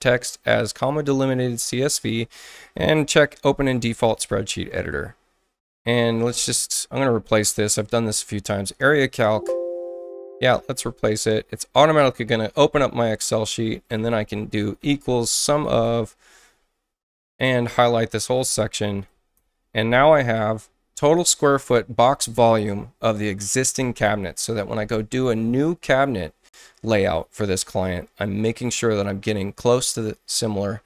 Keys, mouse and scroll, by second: 4.1 click, 6.5 click, 9.1 click, 10.5 click, 13.8 click, 14.6-16.3 typing, 17.1-18.3 drag, 19.0 shift+0, 19.4 Return, 21.3 scroll up 2.